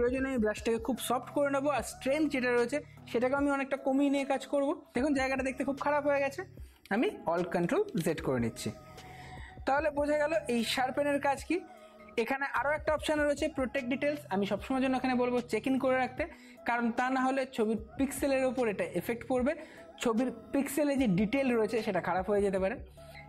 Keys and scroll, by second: 7.9 ctrl+alt+z.